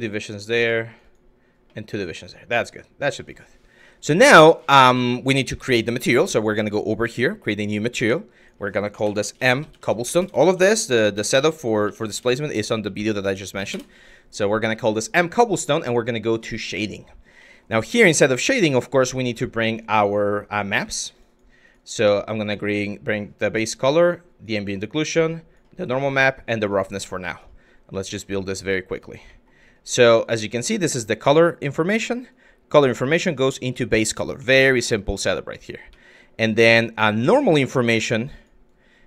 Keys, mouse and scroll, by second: 0.5 click, 0.6 click, 1.3 click, 2.1 Tab, 2.8 drag, 6.1 click, 6.8 click, 7.9-9.8 drag, 9.8 BackSpace, 9.9 BackSpace, 11.9-13.3 drag, 11.9 BackSpace, 17.0 click, 17.5 click, 27.5 click, 28.3 click, 28.9 click, 30.3 click, 31.2 click, 32.0-33.0 drag, 34.1 drag, 34.6 shift+click, 35.1 click, 35.5 shift+click, 36.7 click, 37.9 drag, 38.3 click.